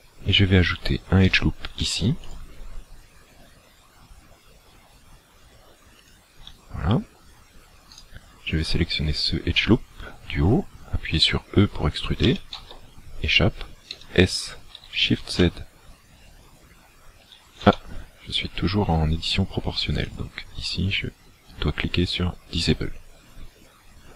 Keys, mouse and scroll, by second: 1.8 ctrl+r, 6.1 click, 7.9 alt+right click, 12.3 e, 13.9 s, 18.4-18.8 scroll down 3, 20.0 click, 23.6 scroll up 3.